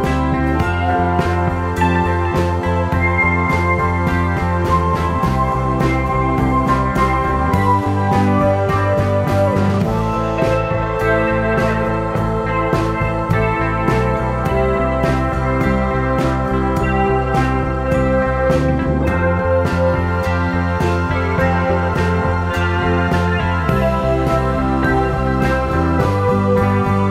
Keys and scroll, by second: 13.7 super+z, 14.0 super+z.